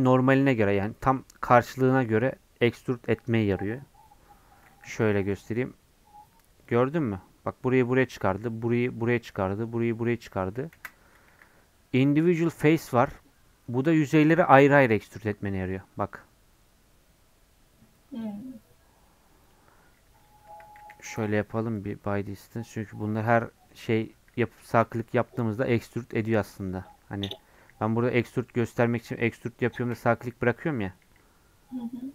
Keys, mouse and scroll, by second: 0.5 scroll down 1, 1.0-4.0 middle drag, 4.0 scroll up 1, 4.3 scroll down 1, 5.5 alt+e, 10.7 ctrl+z, 21.9 m, 22.8 click, 22.9 scroll up 1, 23.2 3, 23.7 middle click, 24.4-24.9 scroll up 1, 24.9-26.7 shift+middle drag, 26.7 alt+click, 27.2 scroll down 1, 27.6 e.